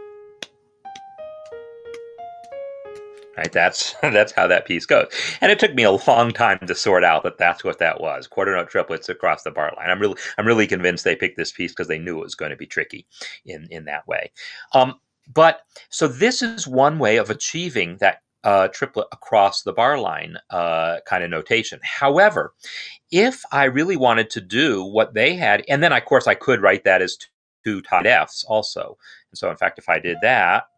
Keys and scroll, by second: 3.3 space.